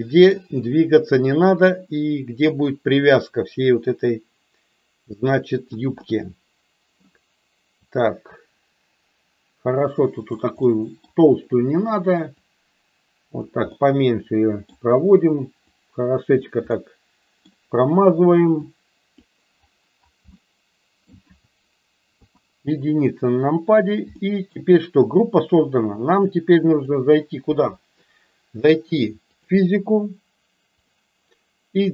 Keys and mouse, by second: 1.6-5.6 drag, 6.0 middle click, 7.8-10.2 drag, 10.7 middle click, 12.3-13.3 drag, 13.6-14.6 middle drag, 15.7 click, 16.7 middle click, 18.6 click, 20.3 middle click, 22.1 KP_1, 24.1 shift+middle click, 26.1 click, 29.2 click.